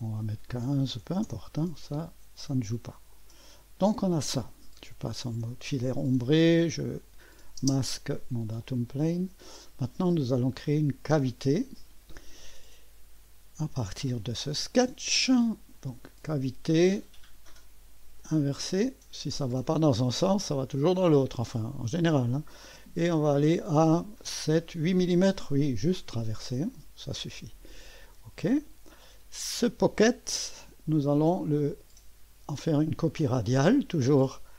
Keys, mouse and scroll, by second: 0.8 KP_1, 1.0 KP_5, 1.2 Return, 3.1 click, 5.3 Return, 6.8 click, 7.6-8.6 typing, 8.6-9.6 drag, 10.0 click, 11.0 click, 14.4 click, 15.7 click, 18.2 click, 25.6-26.7 drag, 28.1 click, 29.6 click, 30.9 click.